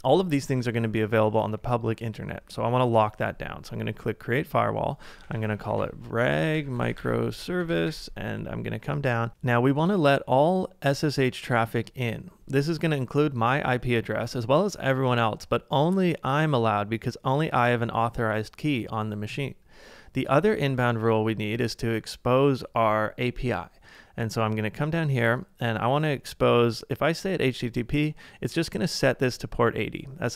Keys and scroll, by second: 4.9-8.6 typing.